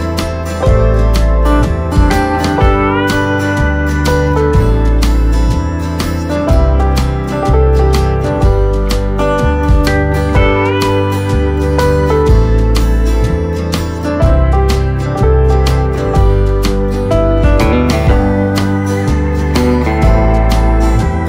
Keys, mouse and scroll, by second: 0.7 KP_1, 1.6 click, 2.6 g, 5.9-7.1 middle drag, 7.1-8.2 right drag, 8.2 middle click, 8.7 click, 10.8 click, 11.2 middle click, 12.0 KP_7, 12.6-13.6 middle drag, 13.6 KP_7, 14.5-16.0 shift+middle drag, 16.0 shift+a, 19.1 g.